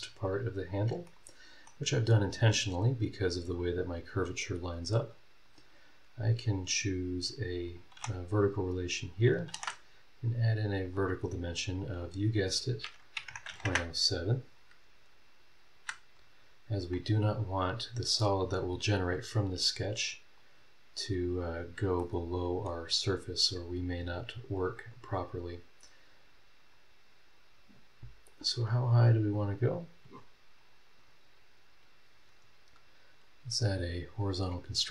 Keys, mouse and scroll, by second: 0.0 scroll down 1, 0.4-1.0 scroll up 2, 1.0 middle click, 1.1 right click, 1.9 scroll down 2, 2.1-2.4 scroll up 2, 5.4 click, 7.7 click, 7.9 v, 8.8 scroll up 2, 9.5 shift+v, 10.8 click, 12.0 click, 13.2 KP_Decimal, 13.3 KP_0, 13.5 KP_7, 13.6 KP_Enter, 15.7 Escape, 16.1 scroll down 1, 17.4 scroll up 1, 20.4 click, 22.0 middle click, 22.2 right click, 22.8-24.3 scroll down 7, 24.5-25.6 scroll up 8, 26.7-28.5 drag, 29.5 click, 30.6 click, 33.1 click, 34.1 click.